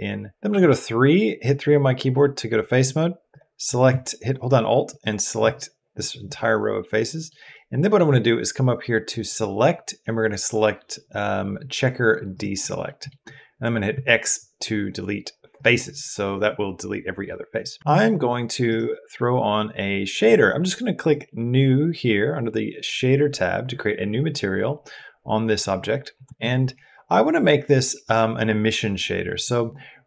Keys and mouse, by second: 0.3 3, 3.1 click, 6.2 middle click, 6.8 click, 7.4 click, 9.2-12.2 drag, 12.7 middle click, 13.7 x, 17.6 Tab, 20.9 click, 24.8 middle click.